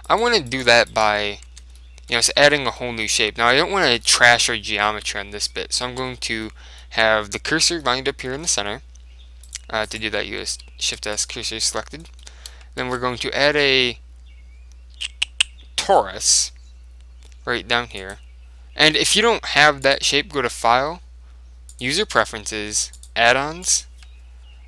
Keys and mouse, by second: 1.6 Tab, 1.8-2.9 middle drag, 2.2 Tab, 2.2 right click, 2.5 z, 5.7-10.1 middle drag, 9.5-11.9 right drag, 10.6 shift+s, 11.6-14.0 middle drag, 12.9 shift+a, 19.9 click.